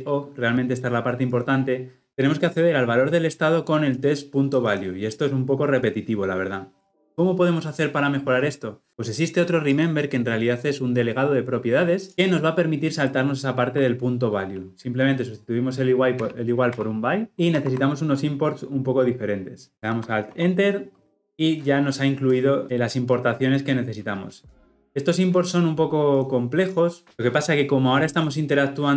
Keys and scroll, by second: 19.8 alt+Return.